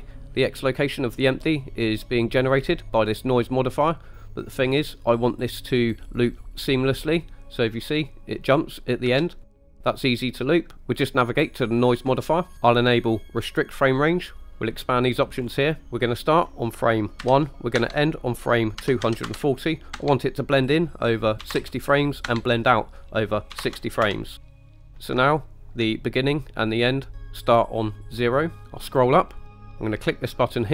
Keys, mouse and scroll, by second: 9.1 space, 10.0 click, 12.5 click, 13.8 click, 14.9 click, 15.4-15.8 scroll down 3, 15.8 click, 16.4-18.0 drag, 20.4-24.1 drag, 25.4 ctrl+middle click, 28.9 scroll up 3.